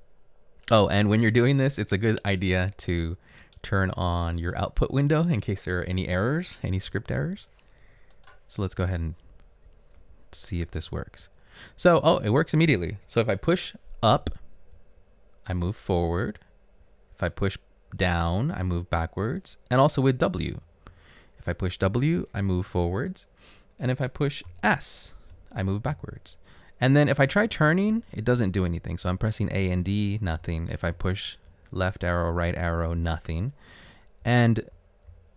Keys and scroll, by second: 7.0 Right, 9.0 Right, 9.6 Right, 10.4 Up, 10.9 Left, 14.8 Up, 15.7 Up, 17.2 Down, 17.8 typing, 21.8-22.5 typing, 26.1-27.6 typing, 31.1 Left, 32.8 Left, 32.8 Right, 34.0 Left, 34.5 typing.